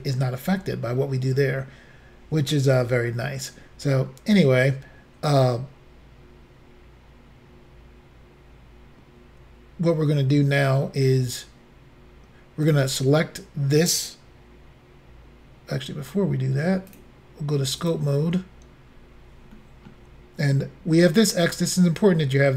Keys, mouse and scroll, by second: 12.7 click, 16.9 click, 17.8 click, 18.6-19.0 scroll up 4, 19.6 shift+middle click.